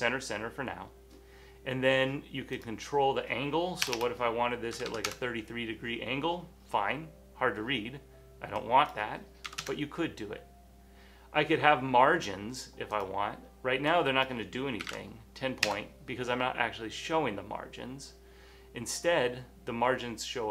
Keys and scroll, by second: 4.0-4.9 typing, 5.0 Return, 5.1 Return, 6.7-8.0 typing, 9.6 shift+Return, 9.7 typing, 14.7-15.4 typing, 15.7 Return, 17.1-18.9 typing.